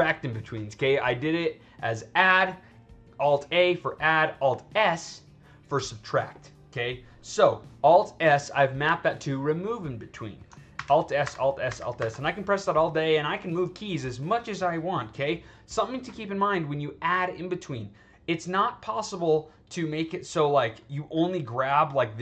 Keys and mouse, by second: 7.4-8.2 drag, 10.7 alt+s, 11.1 alt+s, 11.6 alt+s, 11.9 alt+s, 21.2-22.2 drag.